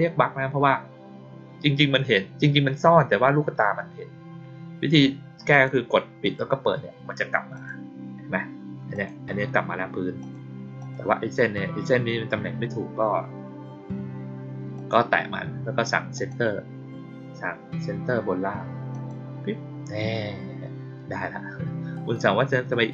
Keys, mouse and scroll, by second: 5.4 click, 6.1 click, 7.4 click, 8.8 click, 10.1 click, 10.7 click, 14.7 click, 16.1 click, 18.8 click.